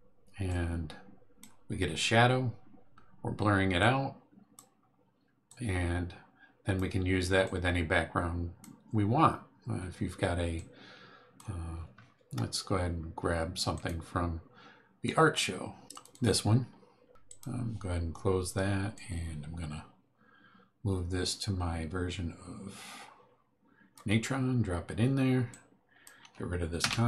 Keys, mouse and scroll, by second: 0.5-1.6 drag, 3.8 click, 5.4-6.9 drag, 7.4-8.8 drag, 10.5-11.5 drag, 13.7 click, 15.9 click, 17.2 click, 18.9-24.1 drag, 25.5 click, 26.8 Delete.